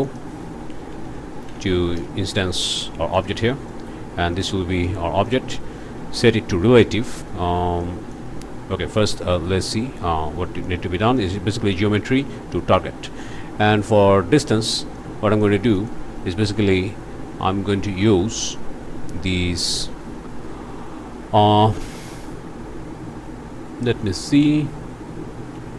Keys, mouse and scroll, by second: 0.0 click, 0.9 i, 1.1 n, 2.0 Return, 3.1 click, 3.5 click, 4.3 click, 5.2 click, 7.1 click, 7.8 click, 11.2-12.9 drag, 13.6 click, 14.9 click, 15.7 click, 25.5 Escape.